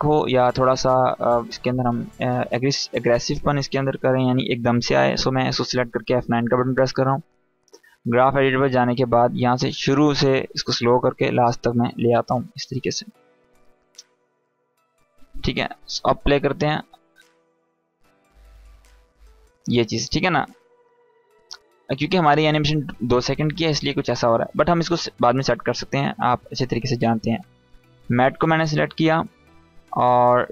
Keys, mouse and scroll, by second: 5.8 F9, 7.3-8.6 drag, 16.0 space, 19.1 space, 19.5-20.1 click, 20.0 space, 22.7-23.9 drag, 26.5 click, 30.4 u.